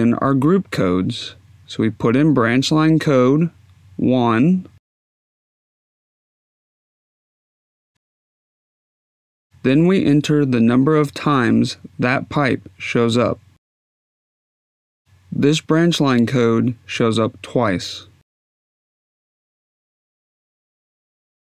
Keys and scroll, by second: 7.0 1, 8.5 Tab, 19.5 2, 21.3 Tab.